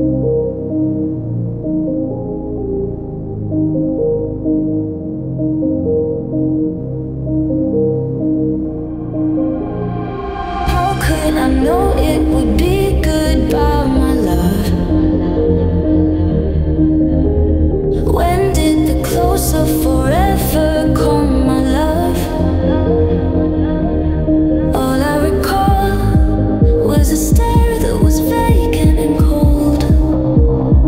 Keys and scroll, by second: 17.4 space.